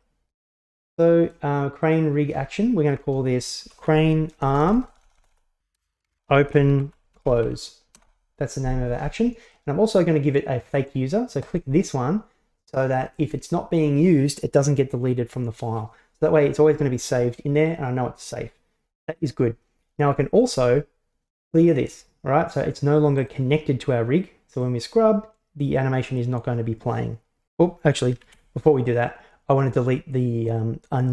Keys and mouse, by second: 0.6 middle click, 2.0-8.7 drag, 4.5 BackSpace, 4.7 BackSpace, 5.1 BackSpace, 5.4 BackSpace, 11.5 click, 23.2 click, 24.7-26.5 drag, 28.3 ctrl+z.